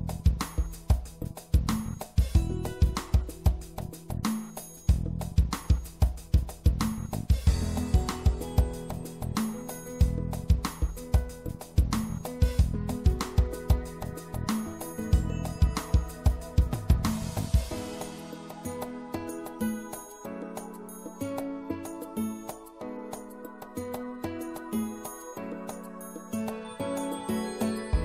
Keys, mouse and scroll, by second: 3.6 e, 5.1-6.9 drag, 8.4-12.6 middle drag, 12.6 e, 13.8-15.8 drag, 16.3-20.1 right drag, 19.2 e, 20.1-22.4 middle drag, 21.6-23.4 drag, 26.0-28.0 drag.